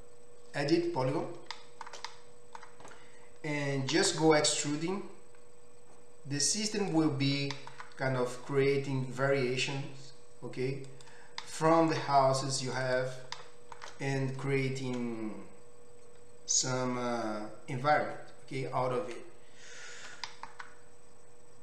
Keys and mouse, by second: 3.9 e, 6.9-12.7 middle drag, 7.3 e, 12.7 click, 12.8 middle click, 12.9 click, 13.0-21.6 shift+middle drag, 20.2 e.